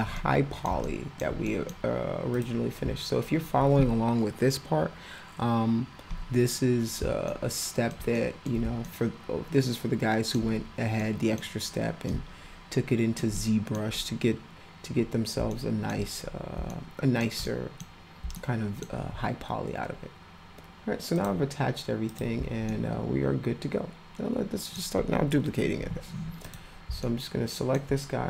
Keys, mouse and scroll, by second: 0.1 middle click, 0.8-1.2 alt+middle drag, 1.4 middle click, 2.3 click, 7.3-7.9 alt+middle drag, 8.1 middle drag, 8.8-10.3 alt+middle drag, 11.0 middle click, 12.0-13.2 alt+middle drag, 13.3 middle click, 15.5-15.9 alt+middle drag, 16.7-17.2 alt+middle drag, 17.4 middle click, 18.3-18.8 alt+middle drag, 21.1 click, 22.1 click, 22.7-24.7 alt+middle drag, 26.4 click, 27.0 alt+middle click.